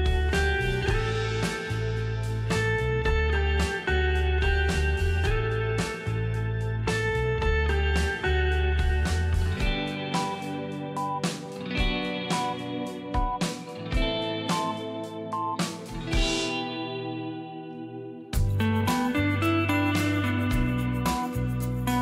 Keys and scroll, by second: 0.6 alt+shift+t, 1.1 a, 1.7 v, 7.1 Home, 7.3 BackSpace, 7.4 BackSpace, 7.6 BackSpace, 11.8 shift+space, 20.3 shift+Right.